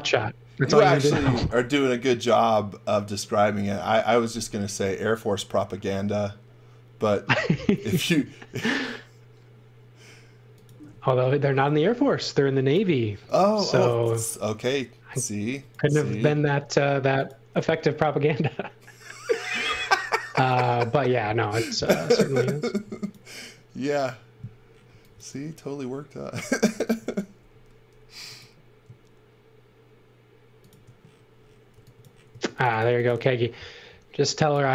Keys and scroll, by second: 7.8 shift+5, 8.6 shift+5, 12.0 x, 12.8 space, 13.7 x, 15.4 x, 16.4 m, 21.9 x, 22.7 space, 24.6-25.6 typing, 27.4 m, 31.7-33.5 typing, 34.6 x.